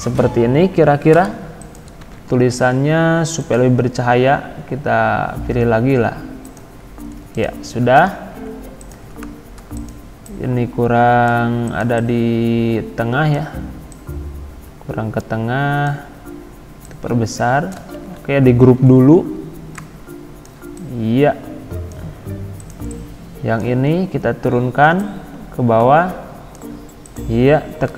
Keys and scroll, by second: 0.6 Escape, 2.1 ctrl+a, 17.9 ctrl+z, 18.8 ctrl+g.